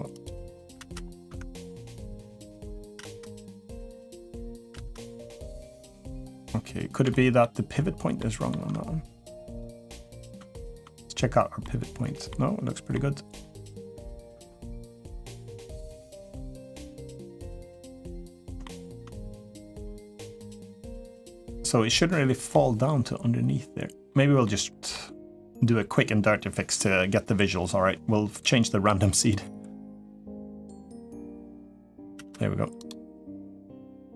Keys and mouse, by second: 0.5 space, 1.1 Tab, 1.7 middle click, 2.8 space, 4.5 space, 5.6 middle click, 6.9-7.2 middle drag, 8.0-8.3 shift+middle drag, 9.2 click, 10.3 shift+middle drag, 11.4-12.1 middle drag, 12.7-13.2 middle drag, 13.7 Tab, 14.2 Tab, 15.3 middle drag, 15.8 middle drag, 16.8-17.6 middle drag, 18.4-18.8 shift+middle drag, 20.0 middle click, 21.0 click, 22.3-23.9 middle drag, 24.2-24.7 middle drag, 28.2 click, 29.0 click, 30.7 click, 32.6 click, 32.6 space.